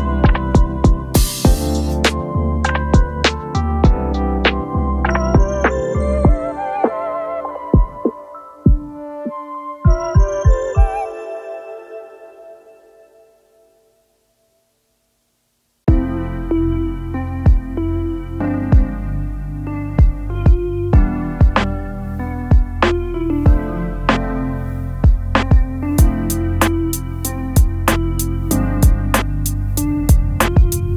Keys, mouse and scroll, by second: 10.5 shift+click, 13.1 ctrl+scroll up 3, 13.9 alt+scroll up 3, 14.4-15.0 space, 15.3 alt+scroll down 1, 16.8 shift+click, 21.1 shift+click, 28.0 shift+click.